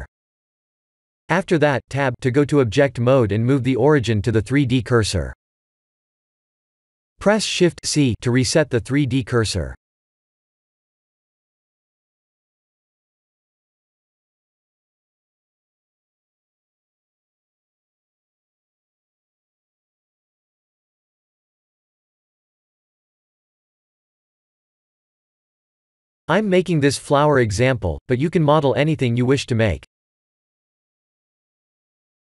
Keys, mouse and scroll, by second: 0.2 click, 2.8 Tab, 3.7 Tab, 4.6 shift+c, 5.5 scroll up 1, 6.1 scroll up 2, 6.1 KP_Decimal, 6.9 click, 7.7 scroll down 3, 8.4 KP_7, 9.5 g, 11.0 s, 12.7 g, 13.7 r, 17.0 shift+d, 18.6 shift+d, 25.8 click, 26.4 shift+click, 28.9 ctrl+j, 30.3 scroll up 1, 30.6 middle click.